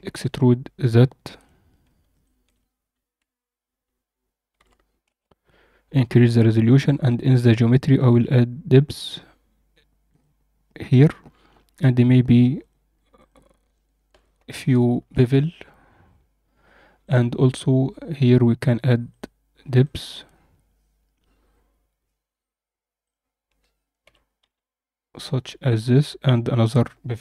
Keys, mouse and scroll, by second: 1.3 click, 2.2-5.0 shift+drag, 6.2-7.1 scroll down 1, 7.1 click, 7.1-9.1 scroll down 3, 10.0 click, 12.5 click, 13.1-15.0 drag, 14.4 0, 16.9 click, 19.0 click, 19.7 click, 22.9 click, 24.0 g, 26.6-27.2 drag.